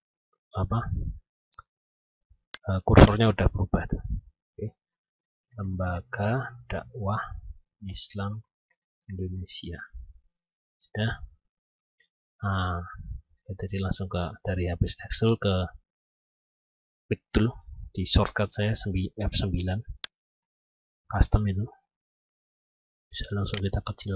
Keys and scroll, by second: 10.3 F9.